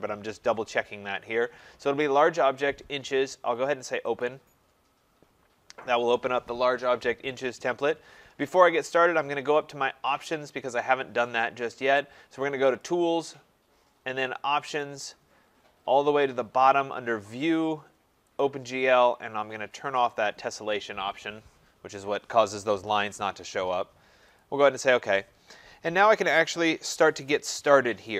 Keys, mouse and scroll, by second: 4.2 click, 12.9 click, 14.9 click, 17.6 click, 18.4 click, 20.1 click, 24.4 click.